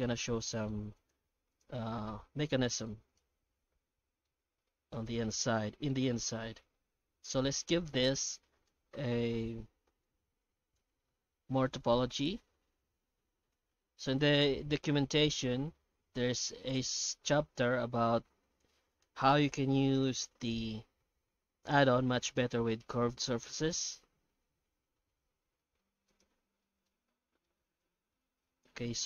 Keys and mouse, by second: 0.0-0.7 middle drag, 0.9 right click, 1.3 x, 2.0 shift+a, 3.8-4.2 shift+middle drag, 4.9-5.9 middle drag, 6.9 F9, 26.1 right click, 26.3 Tab, 26.8 alt+middle click.